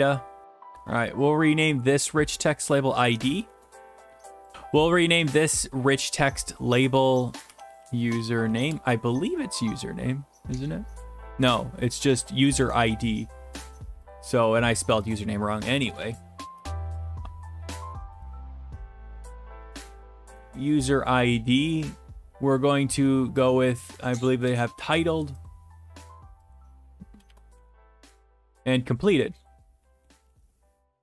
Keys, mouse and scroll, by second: 0.0-0.4 typing, 1.3-3.0 drag, 3.1 click, 3.1 i, 3.2 d, 3.5 Return, 7.5-8.5 typing, 8.6 Return, 9.5 alt+Tab, 12.6 alt+Tab, 13.7 click, 14.1 click, 14.5 click, 15.1 click, 15.7-16.7 typing, 17.8 Left, 18.0-18.4 typing, 18.6-19.4 Left, 19.5 Delete, 20.0 typing, 20.2 Return, 21.2-22.4 drag, 23.5 click, 24.5 alt+Tab, 25.5-26.5 drag, 27.3-28.0 typing, 27.3 click, 29.0 click, 29.5 click, 30.1-31.0 typing, 30.1 right click.